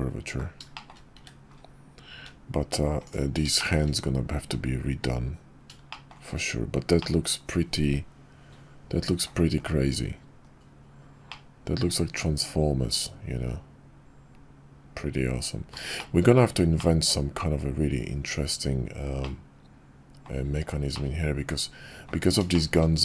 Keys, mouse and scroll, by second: 0.7 shift+drag, 1.1 `, 2.1 `, 3.6 shift+middle drag, 5.9 shift+middle click, 7.0-9.3 middle drag, 9.6 KP_5, 11.3-15.7 middle drag, 15.9 shift+middle drag, 16.7-17.1 middle drag, 19.2-20.2 middle drag, 20.9-22.1 middle drag, 22.5 shift+middle drag.